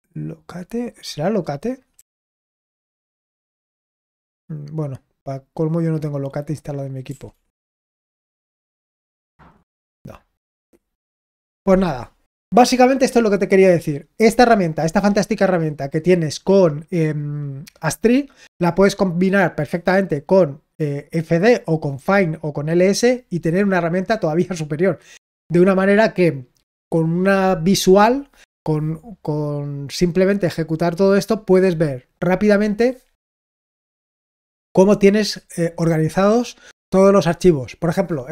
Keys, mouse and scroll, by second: 1.2-38.3 drag.